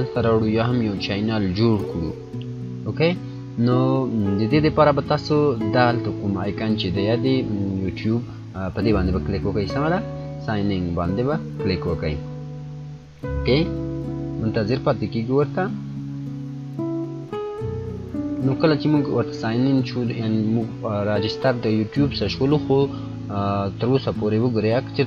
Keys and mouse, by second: 10.3 click, 10.5 click.